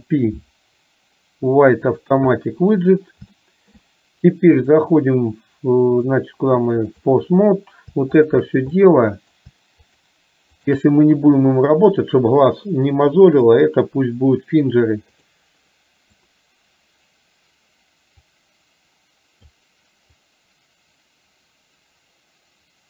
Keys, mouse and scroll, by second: 3.4 shift+middle click, 4.8 click, 6.0-7.1 drag, 8.3 shift+click, 8.8 middle click, 9.9 shift+click, 10.7 shift+click, 13.4-15.4 drag, 16.1 click, 18.3-19.5 drag, 20.2-22.8 drag.